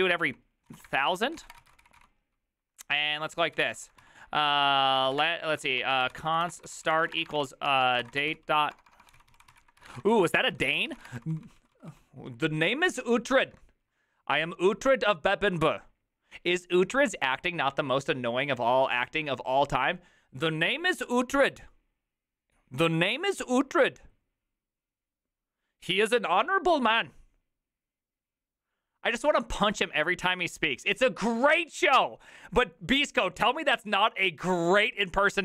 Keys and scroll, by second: 0.0-11.7 typing, 13.2-14.0 typing.